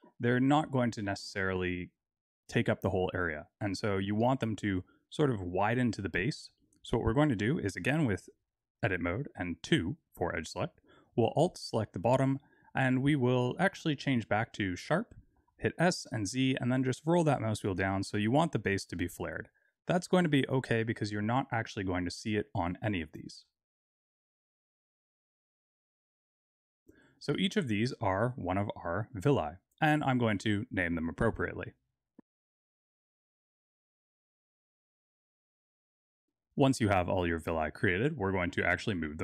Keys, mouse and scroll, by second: 3.9 Tab, 10.9 alt+click, 13.3 click, 15.3 s, 22.5 Tab, 22.9 click, 23.2 Tab, 23.8-26.1 typing, 24.0 alt+click, 24.7 click, 24.9 Tab, 25.0 click, 25.1 Tab, 25.3 alt+click, 25.7 click, 25.8 Tab, 26.0 alt+click, 26.5 Tab, 26.7 scroll down 2, 26.8 click, 27.9 click, 28.4 shift+click, 31.5 click, 32.0 click, 32.1 click, 32.7 l, 33.3 click, 33.7 l, 34.0 click, 34.2 click, 34.5 l, 34.9 click, 35.5 l, 36.2 click.